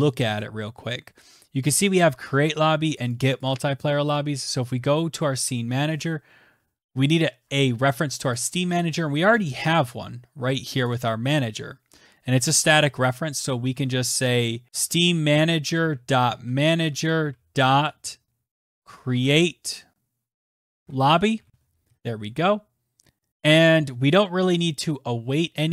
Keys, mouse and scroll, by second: 0.0-0.6 scroll, 1.5 click, 1.7 click, 2.1 scroll, 2.8 click, 2.9 click, 3.2 click, 3.4 click, 4.4 click, 8.1 click, 8.5-10.7 scroll, 10.7 click, 10.7 scroll, 10.8 click, 12.9 click, 14.7-17.0 typing, 18.3-21.7 typing, 23.0 ctrl+z, 24.9 Return.